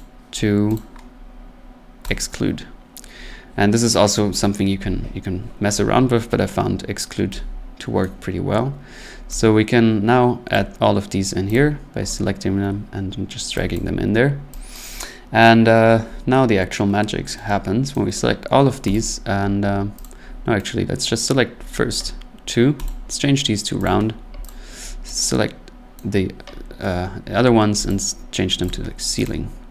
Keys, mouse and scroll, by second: 0.8 click, 2.1 click, 8.0 right click, 10.5 click, 11.5 click, 13.2-13.6 scroll, 13.7 click, 14.7 click, 17.9 right click, 18.9 click, 20.0 click, 21.2 right click, 22.9 click, 23.8 click, 24.5 click, 26.0 right click, 27.9 click, 28.7 click, 29.2 click, 29.5 middle click.